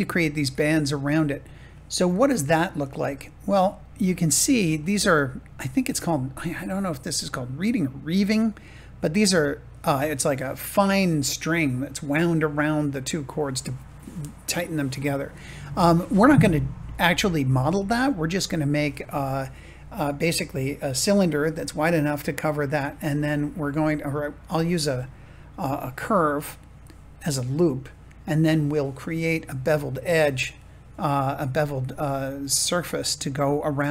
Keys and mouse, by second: 3.7 shift+middle click.